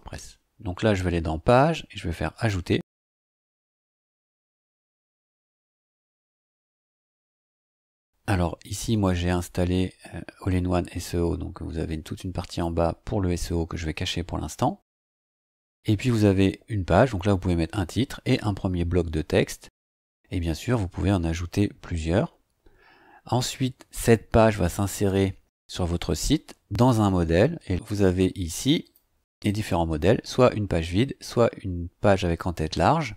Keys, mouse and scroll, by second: 2.3 click, 12.4 click, 28.8 click.